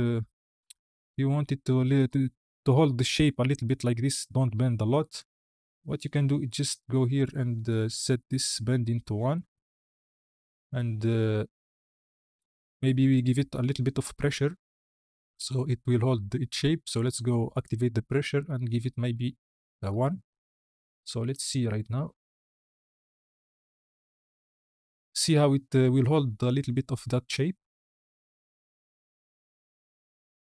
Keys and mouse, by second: 4.3 space, 4.8 space, 8.6-9.6 drag, 17.6-20.1 drag, 21.2 click, 22.7 space.